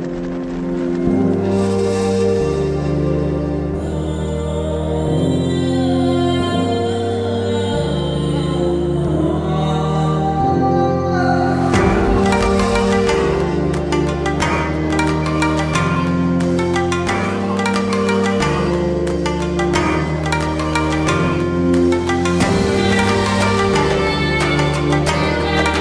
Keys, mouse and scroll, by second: 3.1 right click, 4.9 click, 7.9 click, 8.0-8.4 alt+scroll up 2, 8.8 scroll up 1, 9.0 alt+space, 9.4-10.1 alt+click, 9.5 alt+space, 11.7 alt+b, 12.4 alt+right click, 12.5 alt+click, 12.6 alt+click, 12.7 alt+right click, 12.8 alt+click, 13.1 alt+BackSpace, 13.2 alt+scroll up 2, 13.2 ctrl+d, 13.2 click, 13.5 space, 13.6 click, 13.7 BackSpace, 13.8 ctrl+d, 13.9 alt+scroll down 2, 13.9 space, 14.0 right click, 14.0 click, 14.0 v, 15.0-15.3 click, 20.0 v, 20.3 ctrl+t, 22.3-23.8 alt+drag, 25.3 ctrl+click.